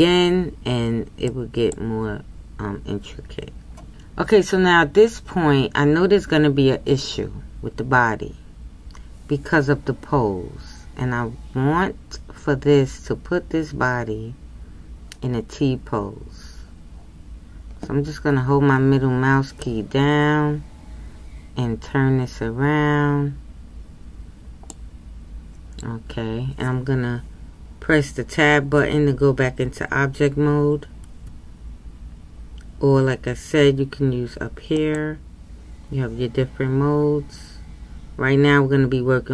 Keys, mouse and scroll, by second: 19.6-22.6 middle drag, 31.1 Tab.